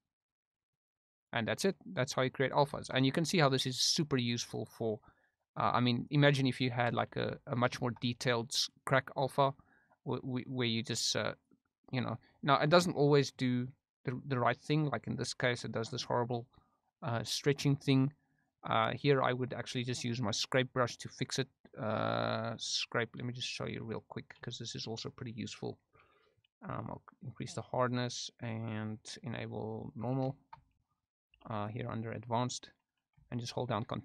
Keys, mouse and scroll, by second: 0.1 middle click, 0.7 click, 1.5 middle click, 2.1 click, 2.8 shift+middle click, 3.2 click, 3.5 click, 3.9 click, 4.3 middle click, 5.0-6.1 drag, 6.7 shift+middle click, 7.1 f, 7.8 shift+middle click, 8.7 middle click, 9.7 click, 10.8 click, 11.8 middle click, 12.5 middle click, 16.2 middle click, 17.0 middle click, 18.3 click, 22.6 click, 26.9-27.9 drag, 28.4 click, 30.0 click, 30.4 shift+middle click, 30.7 middle click, 31.3 f, 33.2 ctrl+click, 33.9 ctrl+click.